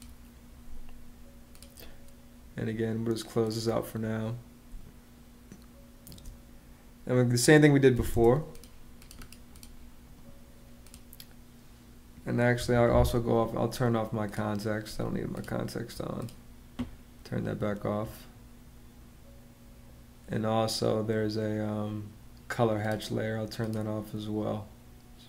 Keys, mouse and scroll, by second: 4.5 space, 7.7 m, 7.9 space, 12.3 Escape.